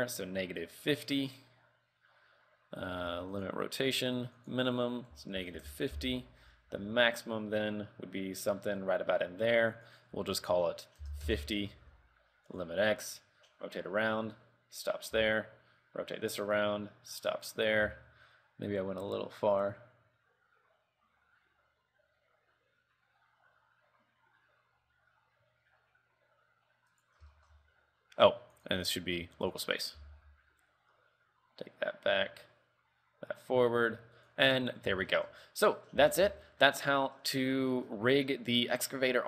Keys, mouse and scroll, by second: 1.0 click, 1.3 click, 4.5 ctrl+click, 6.8 r, 10.6 ctrl+click, 12.8 click, 13.1 r, 15.5 r, 18.0 r, 27.5 shift+middle click, 28.7 click, 30.4 r, 34.6-35.3 scroll down 4, 35.3 shift+middle click, 35.6-36.0 scroll up 3, 36.0 middle click, 36.1 a, 36.2 scroll down 2, 36.4 shift+middle click, 37.0 middle click, 37.5 scroll up 2, 37.8 middle click, 38.2 scroll up 3, 38.7 scroll down 3.